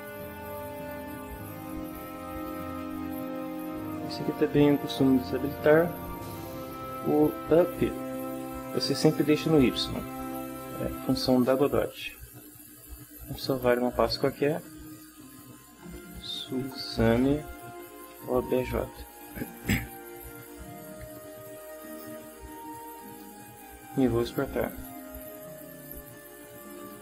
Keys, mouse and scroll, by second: 0.9-2.6 drag, 5.5 click, 13.4 click, 14.9 click, 15.6-19.2 typing, 21.1-22.2 drag, 23.0 click, 24.2 click, 25.8-27.0 drag.